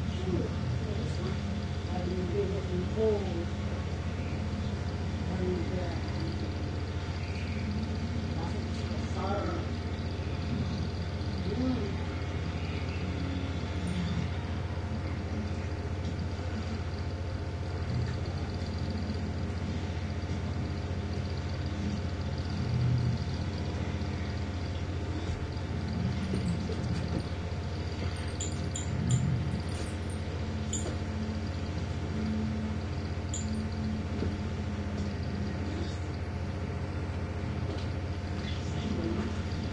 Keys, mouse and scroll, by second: 0.5 click, 1.7 click, 3.0 click, 4.5 click, 5.6 click, 7.5 click, 8.8 click, 11.2 click, 12.4-12.9 ctrl+scroll down 2, 13.6-16.6 drag, 18.2 ctrl+g, 19.9-21.8 drag, 23.2-25.1 drag, 29.2 click, 31.2-34.4 drag, 36.0 click, 37.2 click, 39.4-39.7 typing.